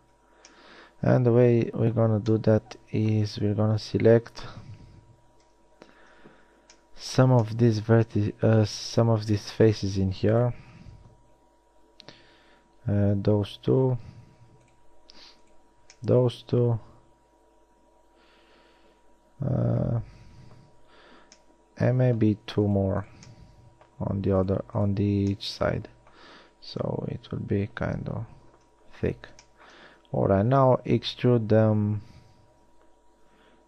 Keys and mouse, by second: 0.2 z, 5.1 KP_3, 6.0 ctrl+KP_3, 16.3-17.3 middle drag, 21.6-22.1 drag, 23.9 middle click, 27.3 KP_3, 28.1 KP_1, 28.7 z, 29.3 z, 31.3 e.